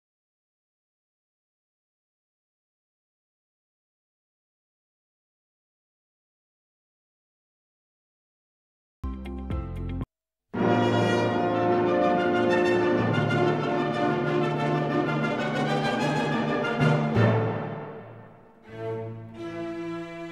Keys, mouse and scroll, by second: 0.4-1.9 drag, 1.9-3.9 drag, 3.9 scroll up 1, 4.8-8.8 middle drag, 8.8-16.1 drag, 17.8 scroll up 1.